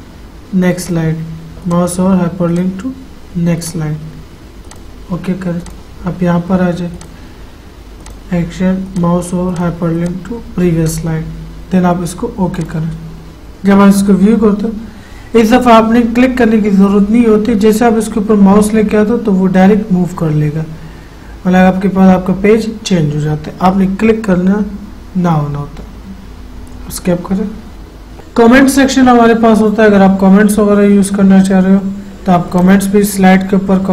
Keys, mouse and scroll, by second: 1.0 click, 14.5 F5, 32.7 click.